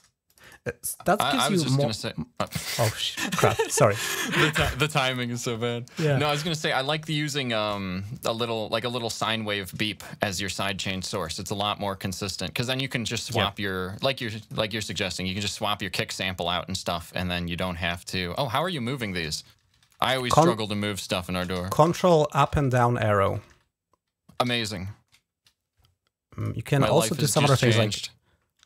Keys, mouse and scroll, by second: 0.1-1.5 drag, 1.8 click, 2.4 Delete, 2.6 Return, 4.6-5.6 scroll up 3, 7.4 click, 10.2 click, 11.1 ctrl+Up, 13.7 click, 14.3 shift+click, 16.1 ctrl+Up, 18.4 click, 18.7 click, 19.3 ctrl+Up, 19.9 ctrl+Up, 21.8 ctrl+Up, 23.1 ctrl+Up, 24.3 ctrl+Up, 26.3 click, 27.6 shift+Down.